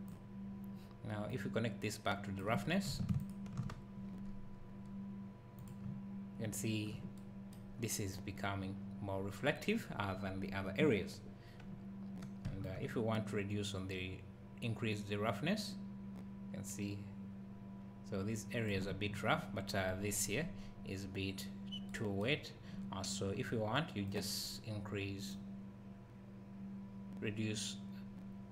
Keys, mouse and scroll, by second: 0.0 click, 3.3 ctrl+shift+click, 5.6 click, 5.9 `, 12.7 shift+click, 24.1 click.